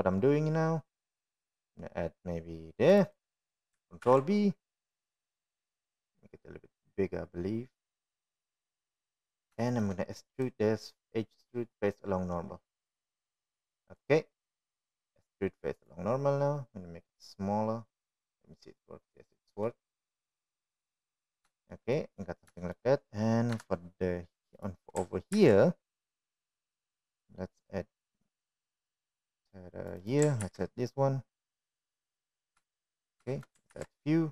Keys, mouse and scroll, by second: 1.7 ctrl+r, 6.1 ctrl+b, 11.8 shift+middle click, 12.6 right click, 15.4 click, 16.1-20.3 right drag, 20.4-22.4 middle drag, 23.7 shift+middle click, 24.1 middle click, 24.7 shift+middle click, 25.7 KP_1, 27.5 ctrl+r, 32.6 ctrl+r.